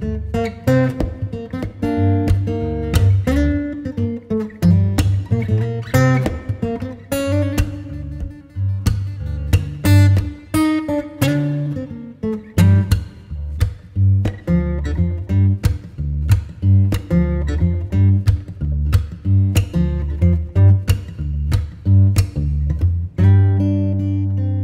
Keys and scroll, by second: 7.8 Escape, 14.2 F2, 17.6 5, 18.8 BackSpace, 20.0 6, 23.3 shift+5, 23.7 Return, 24.5 shift+o.